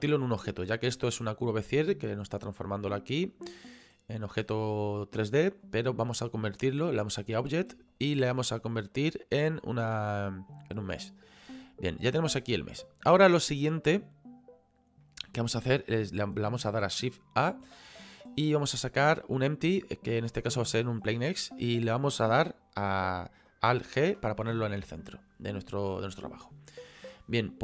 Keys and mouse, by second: 5.6 click, 7.9 click, 8.9 click, 10.9 click, 12.2 right click, 15.0 middle click, 17.7 shift+a, 21.1 click, 23.8 alt+g, 25.0 middle click.